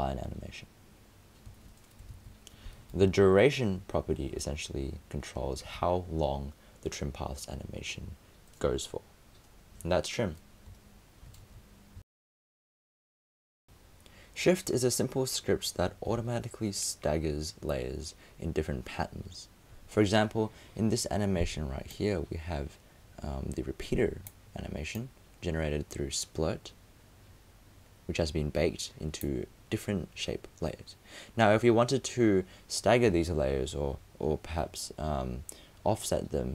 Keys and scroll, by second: 2.1 super+z.